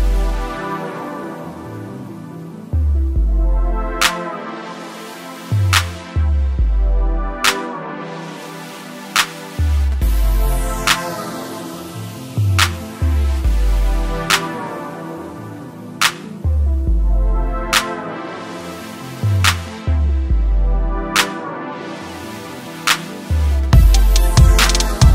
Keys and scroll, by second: 5.8 ctrl+space.